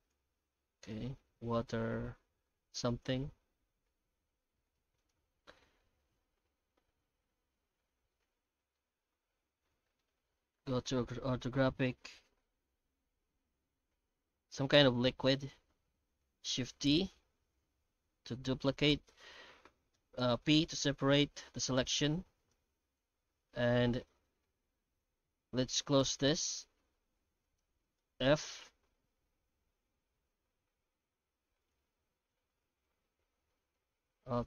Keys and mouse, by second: 0.1 z, 1.2 Tab, 1.7-3.0 middle drag, 4.1 1, 4.6 alt+a, 5.0 right click, 5.9 ctrl+KP_Add, 6.0 ctrl+KP_Add, 6.2 ctrl+KP_Add, 6.3 ctrl+KP_Add, 6.5 ctrl+KP_Add, 6.8 ctrl+KP_Add, 6.9 ctrl+KP_Add, 7.1 ctrl+KP_Add, 7.2 ctrl+KP_Add, 8.2 middle click, 8.9 shift+z, 9.6 alt+middle click, 10.7 KP_5, 12.3 ctrl+KP_Add, 13.9 ctrl+KP_Add, 14.9 shift+z, 15.4 middle click, 16.6 shift+d, 19.6 p, 21.9 Tab, 22.3 right click, 22.8 Tab, 23.2 a, 23.7 Tab, 24.0 Tab, 25.1 2, 25.6 alt+a, 26.4 shift+right click, 27.1 alt+a, 27.4 alt+shift+right click, 28.0 f, 28.6 Tab, 29.8 Tab, 30.1 a, 30.8 alt+n, 32.2 Tab, 33.2 alt+n, 34.2 alt+h.